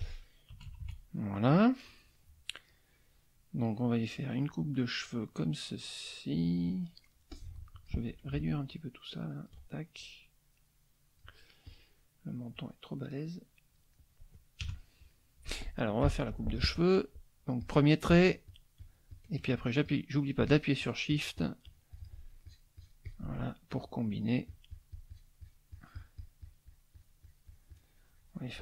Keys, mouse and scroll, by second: 0.5 KP_Subtract, 1.5-7.0 middle drag, 7.3 click, 8.7 ctrl+click, 10.0-11.3 ctrl+drag, 11.7 click, 12.5-13.9 drag, 13.9 middle click, 14.6 KP_Add, 15.1 middle click, 15.2 click, 16.0 F6, 17.6 click, 18.5 shift+click, 19.8-22.2 shift+drag, 22.4 shift+click, 23.7 shift+click, 24.4-25.7 shift+drag.